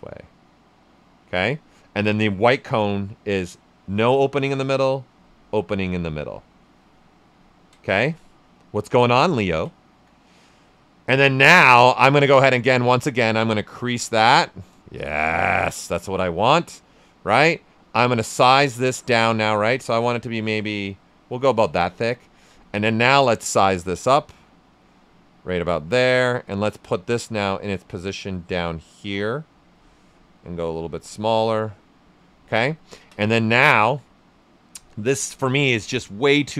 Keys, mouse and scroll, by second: 7.2 ctrl+right click, 9.4 ctrl+right click, 13.7 click, 15.1 shift+f, 16.1 w, 17.6-21.7 drag, 21.7 right click, 22.8-24.8 drag, 24.8 right click, 25.8-32.7 drag, 32.7 ctrl+right click, 33.2 q, 33.4 right click, 33.7-36.5 alt+right drag.